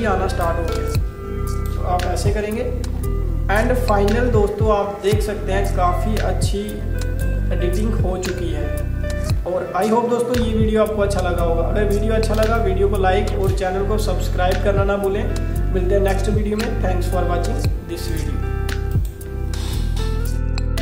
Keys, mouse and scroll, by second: 0.8 space, 0.9 click, 1.3 space, 2.2 alt+scroll down 1, 3.0-3.5 alt+scroll down 2, 7.1 click, 9.5 alt+scroll up 1, 11.0-12.0 alt+scroll up 4, 12.4 space, 12.6 click, 12.9 space, 13.9 scroll up 1, 14.1 scroll down 1, 18.1 click.